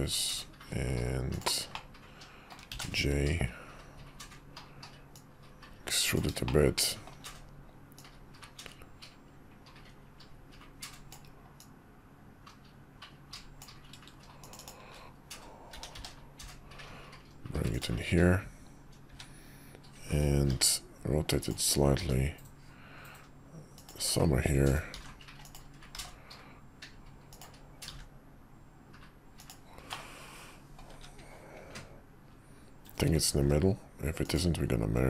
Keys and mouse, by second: 1.8-2.6 middle drag, 6.6-7.2 shift+middle drag, 15.7 g, 20.5 r, 22.0 g, 24.9 r, 25.9 g, 27.9 r, 29.9-30.8 middle drag, 30.9 `, 33.3 alt+x, 34.2 click.